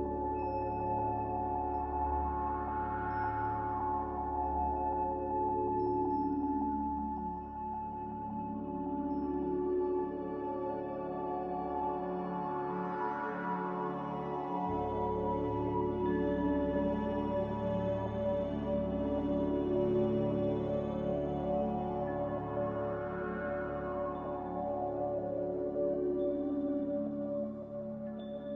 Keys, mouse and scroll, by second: 0.0-0.6 typing, 3.4 z, 4.7 Escape, 6.9 3, 7.0 Return, 20.8 5, 22.8 5, 24.4 5, 24.6 Return.